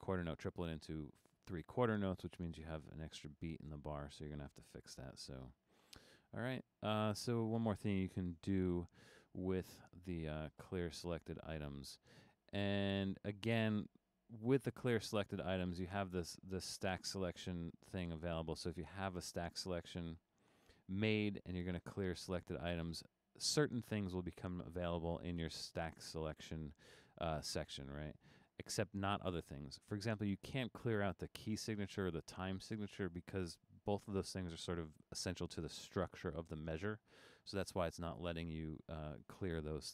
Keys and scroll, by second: 4.7 BackSpace, 5.8 Escape.